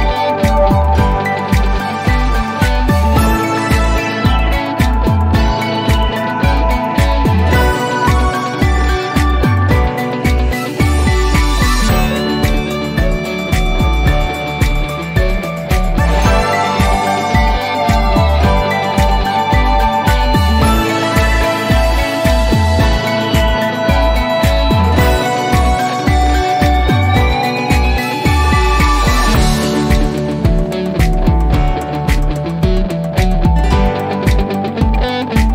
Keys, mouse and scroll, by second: 1.6 click, 4.3 1, 4.8 Return, 5.4-6.9 scroll up 1, 7.0-10.6 drag, 15.6 typing, 16.5 Return, 21.3-22.8 alt+middle click, 23.5 t, 25.7 z, 26.2-27.8 scroll down 2, 27.8-30.6 drag, 33.3-33.8 scroll down 1.